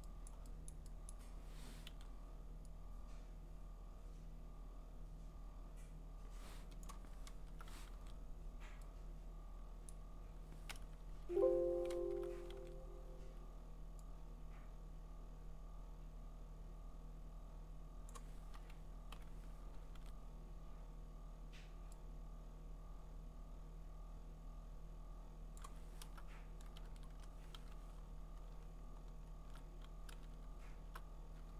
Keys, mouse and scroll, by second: 0.3 click, 0.7 click, 1.1 click, 1.9 i, 6.8 click, 7.3 alt+BackSpace, 7.9 ctrl+d, 9.9 click, 11.1 alt+\, 12.0 alt+BackSpace, 12.6 ctrl+d, 18.1 click, 19.1 Delete, 19.9 ctrl+d, 25.6 click, 26.0 alt+BackSpace, 26.8 ctrl+z, 27.1 BackSpace, 27.6 ctrl+d, 28.0-29.0 scroll, 29.0-30.2 scroll, 30.2-30.5 scroll.